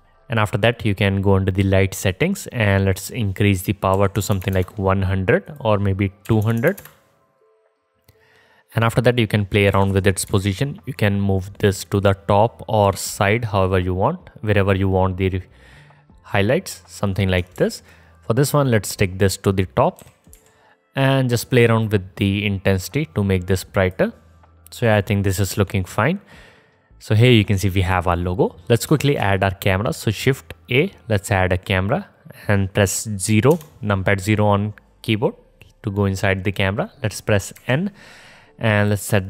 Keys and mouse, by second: 4.5 KP_0, 6.8 KP_0, 9.9 g, 11.9 middle click, 12.2-17.8 drag, 13.0 g, 17.8 ctrl+z, 20.2 g, 22.5-23.7 middle drag, 23.7-26.2 drag, 23.7-25.1 right drag, 29.2 shift+a, 33.7 KP_0, 37.8 n, 39.0-39.2 drag, 39.0-39.2 middle drag, 39.0-39.2 right drag.